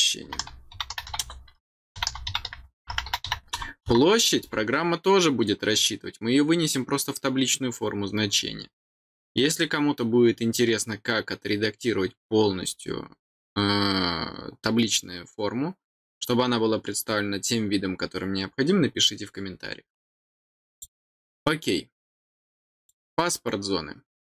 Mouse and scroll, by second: 20.7 click, 22.8 click.